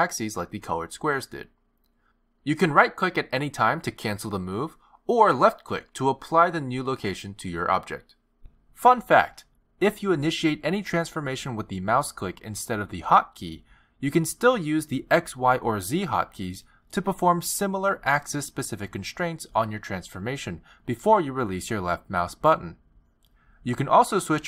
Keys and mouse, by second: 6.6 g, 13.8 click.